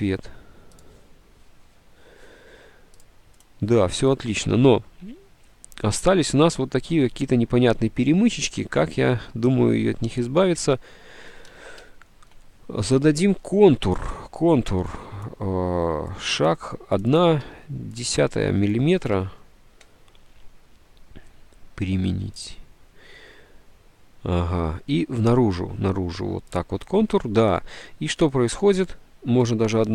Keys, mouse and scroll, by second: 12.0 ctrl+F9, 16.2-17.5 drag, 17.5 1, 19.2 1, 21.7 1.